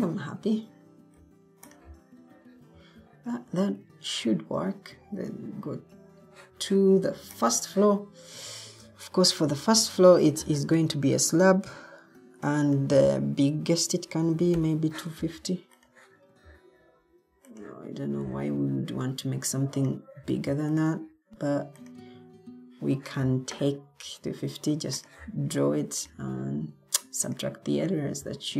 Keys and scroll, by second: 2.7 Escape, 10.0 ctrl+t, 13.7-15.0 typing.